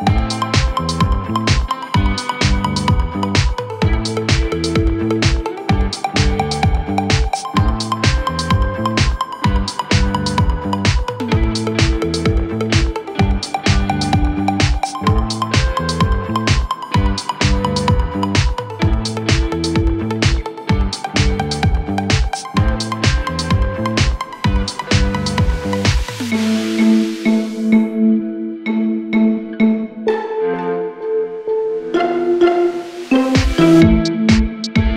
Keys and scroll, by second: 0.8 F1, 4.5 p, 6.8 ctrl+d, 14.9 F1, 15.0 F2, 19.9-23.0 typing, 29.2 ,, 30.1 ctrl+d, 30.2 Escape, 32.2 ctrl+z.